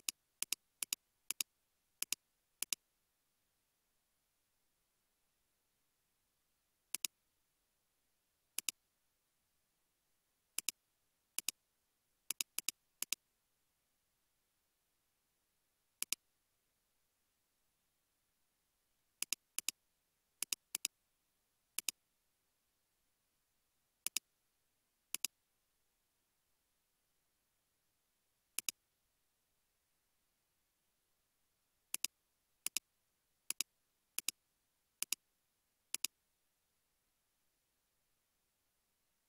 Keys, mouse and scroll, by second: 1.7 typing, 3.0 typing, 9.5-11.5 scroll down 1, 12.6 double click, 17.5 space, 18.2 space, 19.6 double click, 22.3-23.2 typing, 26.9-28.2 scroll down 1, 36.6-39.0 typing, 36.8-37.5 scroll down 1.